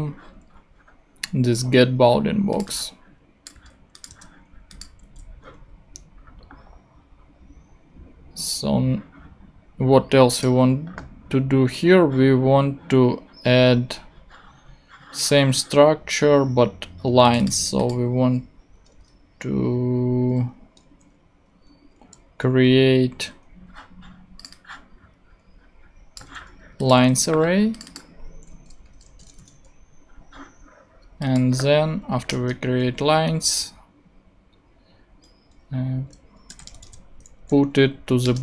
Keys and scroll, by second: 3.5 super+c, 4.1 super+v, 5.0 super+x, 18.7 Tab, 22.9 shift+Return, 26.2 super+c, 26.9 super+v, 28.8 l, 29.2 n, 32.3 Return, 33.3 Return, 36.2-37.4 typing, 37.9 Down, 38.2 Return.